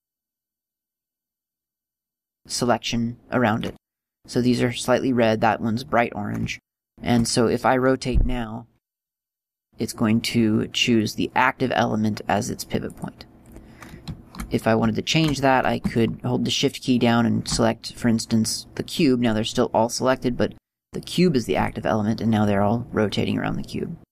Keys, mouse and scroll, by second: 7.0 shift+middle click, 16.9 shift+right click.